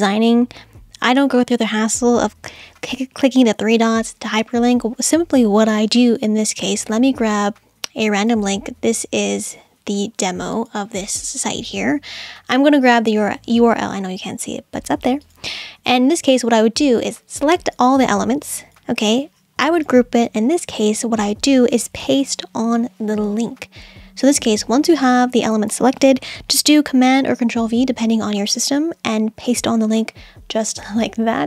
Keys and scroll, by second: 28.8 super+v.